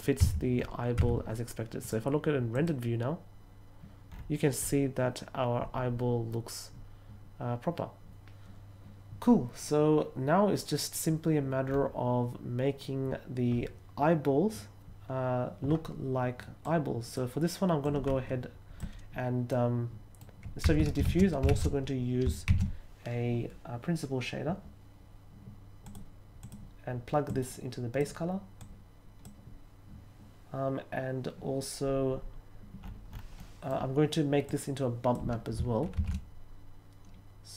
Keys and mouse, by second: 0.1 Tab, 0.9 Tab, 1.8 click, 2.5 click, 16.6-17.1 drag, 17.8-18.7 drag, 19.4 middle click, 20.6 x, 21.4 shift+s, 22.4 shift+a, 25.8 click, 26.4 click, 27.2-28.0 drag, 28.5-29.2 drag, 33.3 middle click, 34.4-35.1 drag, 35.9 shift+a.